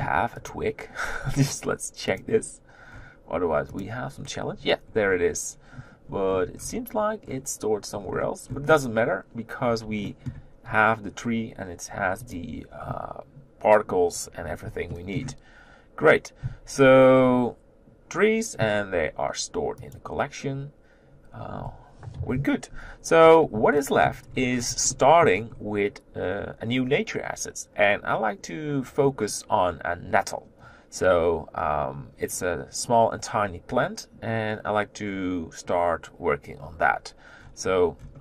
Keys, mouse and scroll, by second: 0.5 click, 4.0 click, 4.9-8.1 scroll up 2, 8.1-10.1 scroll up 1, 10.1-12.3 shift+middle drag, 12.3 click, 15.0 shift+middle click, 15.2-16.8 shift+scroll up 1, 16.8 z, 17.1-18.8 scroll down 4, 21.1 click, 22.2 KP_7, 23.7 shift+middle click, 24.2-24.9 scroll up 6, 24.9 shift+middle click, 25.5-29.5 scroll up 2, 29.5-37.4 scroll up 1, 37.4-38.2 scroll down 8.